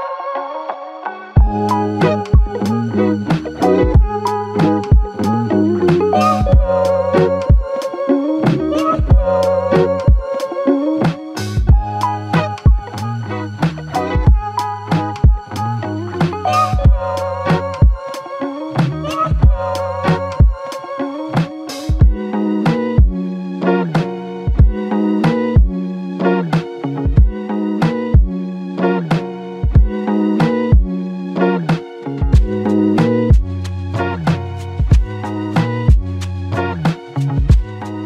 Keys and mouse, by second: 0.3 alt+click, 5.5 double click, 25.8 double click, 32.9 double click, 35.5 double click.